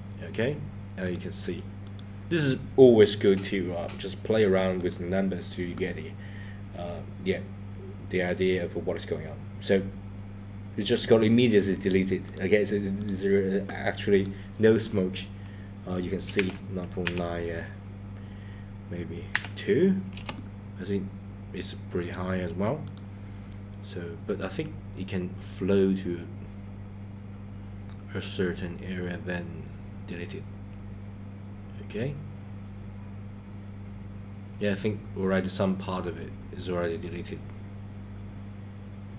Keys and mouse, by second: 1.9 click, 4.8 click, 12.3 click, 13.0 click, 14.1-20.4 drag, 22.0-22.4 drag, 22.9-23.4 drag.